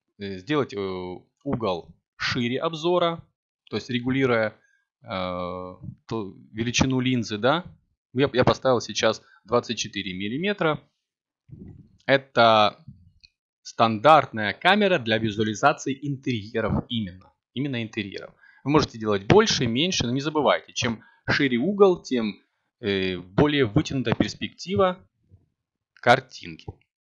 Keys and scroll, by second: 3.1 g, 5.4 0.